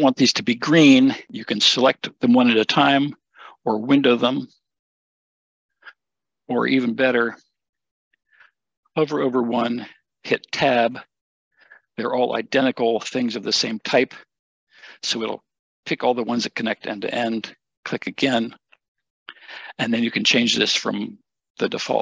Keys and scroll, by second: 10.9 Tab.